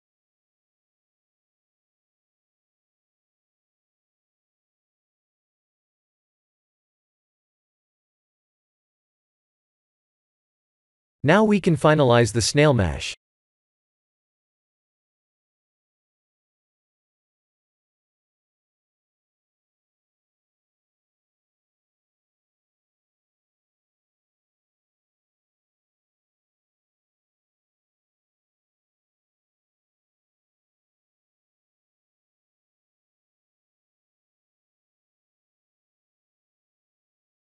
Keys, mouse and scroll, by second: 0.6 g, 2.9 s, 4.5 g, 6.5 shift+d, 8.7 click, 9.1 middle click, 11.2 click, 11.9 KP_1, 13.1 click, 14.2 b, 17.1 s, 18.7 g, 20.5 s, 22.2 scroll up 4, 22.6 shift+middle click, 23.2-23.7 scroll up 4, 23.8 middle click, 25.3 click, 28.7 middle click, 29.5 scroll down 3, 30.1-30.7 scroll down 3, 30.1 click, 30.9 middle click, 31.9 click, 32.5 KP_1, 34.5 g, 36.7 middle click.